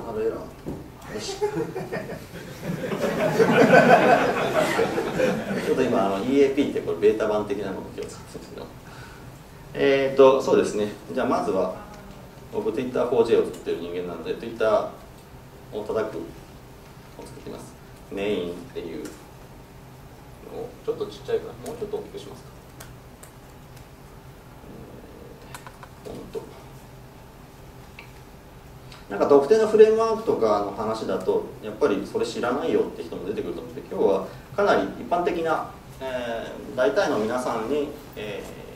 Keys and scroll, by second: 12.8 alt+F7.